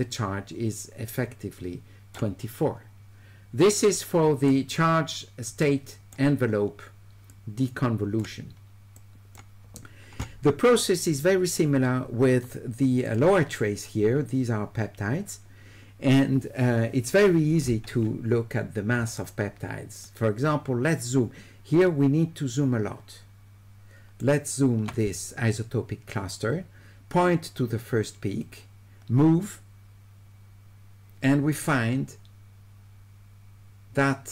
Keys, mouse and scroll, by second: 3.9 right click, 5.7 right click, 7.3 click, 9.0 click, 13.1 click, 19.2 shift+right click, 21.9-24.2 shift+right drag, 28.5-34.3 drag.